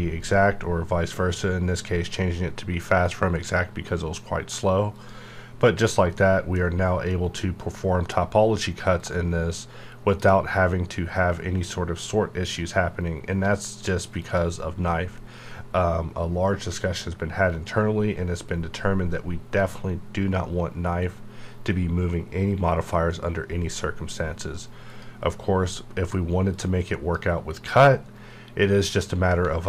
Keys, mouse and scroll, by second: 4.9 alt+e, 5.0 click, 5.5 scroll up 1, 6.1 middle click, 6.6-7.1 scroll up 1, 7.1 middle click, 8.2-8.9 scroll up 1, 8.9-12.5 drag, 14.1 click, 24.8 click, 24.9-28.0 drag, 28.0 right click.